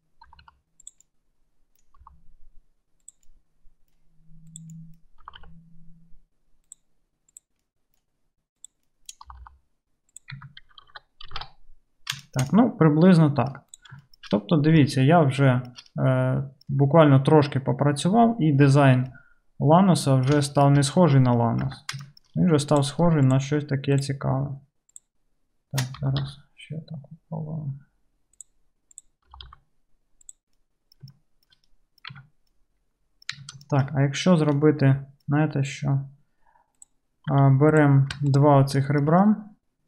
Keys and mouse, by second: 0.3-1.3 drag, 0.3 g, 1.3 right click, 1.3 g, 1.5 click, 1.7-7.5 right drag, 2.1 g, 5.3 g, 7.5-8.7 middle drag, 8.7-13.5 drag, 9.3 g, 10.3 Tab, 10.8 alt+z, 11.4 alt+z, 13.5 right click, 13.7 middle click, 13.9-15.6 shift+right drag, 15.6-16.2 shift+middle drag, 16.2-22.7 right drag, 21.8 Tab, 22.7 middle click, 22.9 shift+right click, 23.3 shift+middle click, 23.4 shift+right click, 24.0 shift+middle click, 24.1 right click, 24.9 shift+middle click, 25.1-28.9 shift+right drag, 26.1 g, 28.9 middle click, 29.1-31.1 right drag, 29.4 g, 31.1-33.5 shift+middle drag, 32.2 Tab, 33.4 Tab, 33.5-36.6 shift+drag, 36.6-38.3 right drag, 37.4 2, 37.8 click, 38.3 shift+middle click, 38.4 shift+click, 38.4-39.8 shift+right drag.